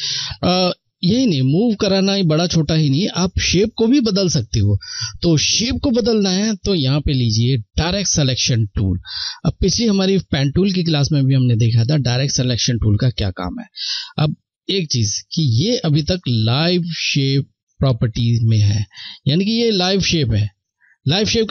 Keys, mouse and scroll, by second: 5.9 Left, 5.9 click, 11.8 Left, 11.8 click.